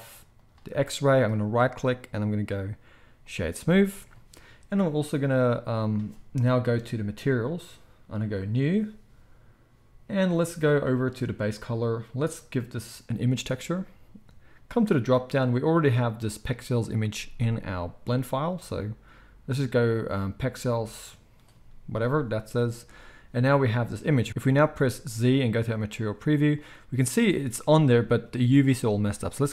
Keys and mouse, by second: 0.3-8.3 drag, 1.6-7.6 middle drag, 1.6-7.6 right drag, 24.3 z, 24.4 z.